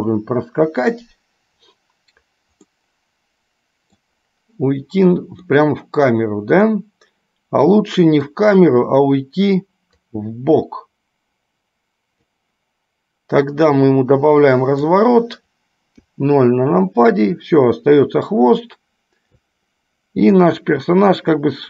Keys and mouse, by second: 2.8-3.9 middle drag, 4.1 middle click, 5.7 middle click, 6.8-8.4 middle drag, 10.2-12.6 drag, 13.9-15.2 drag, 20.7-21.6 drag.